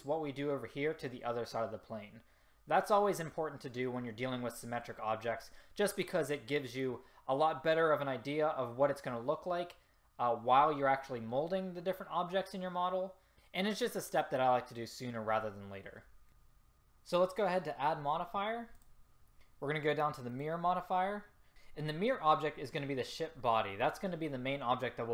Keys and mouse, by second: 20.5-23.4 drag.